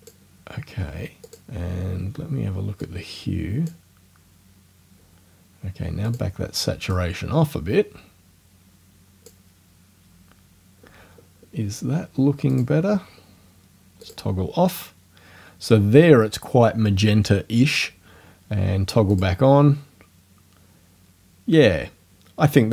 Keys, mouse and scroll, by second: 1.3 click, 2.9-3.9 drag, 6.1 click, 6.9-9.5 drag, 12.5 click, 14.1 click, 19.1 click.